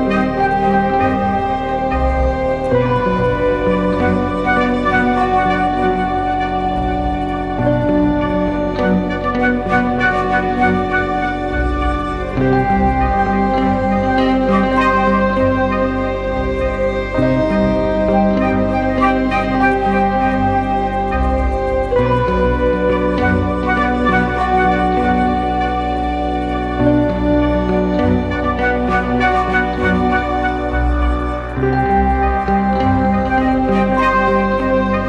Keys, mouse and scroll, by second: 3.4 ctrl+-, 3.6 ctrl+-, 4.5 ctrl+t, 5.7 alt+shift+click, 9.2 Return, 15.0 ctrl+=, 15.2 ctrl+=, 15.6 space, 19.3-20.3 typing, 21.7 double click, 22.9-23.4 typing, 23.9 double click, 30.6-31.1 scroll up 1, 31.2 ctrl+click.